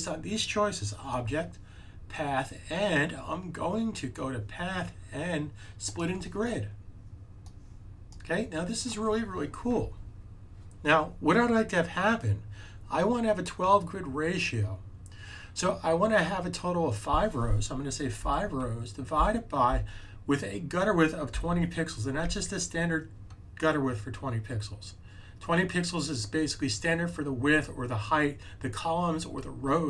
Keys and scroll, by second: 18.1 5, 21.0-22.1 typing.